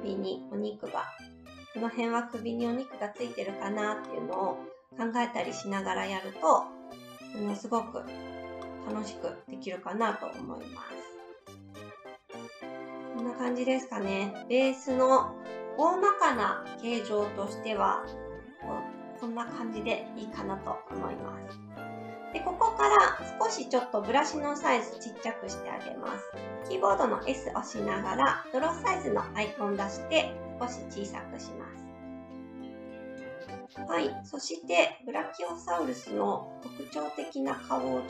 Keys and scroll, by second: 26.9 s.